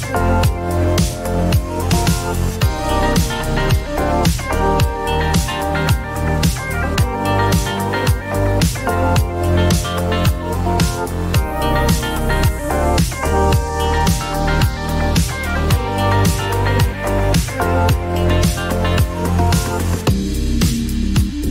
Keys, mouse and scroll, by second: 0.6 click, 1.6-3.7 typing, 5.8 click, 8.6 click, 9.0 click, 10.8 click, 20.8 click, 21.1 click, 21.2 click.